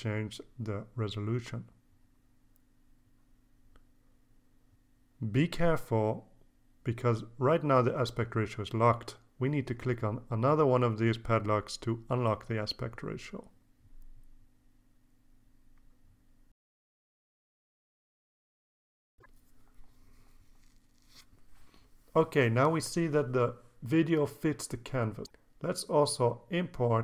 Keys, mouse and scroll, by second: 0.0 KP_6, 0.4 KP_0, 1.0 Tab, 4.1 KP_4, 4.1 KP_8, 4.3 KP_0, 4.9 Tab, 8.6 click, 9.6 click, 10.2 click, 11.8 KP_6, 11.9 KP_4, 11.9 KP_0, 12.6 KP_Enter, 15.9 click, 17.5 KP_4, 17.6 KP_8, 17.7 KP_0, 18.2 KP_Enter, 21.7 click, 24.8 ctrl+s, 26.0 alt+Tab, 26.8 alt+Tab.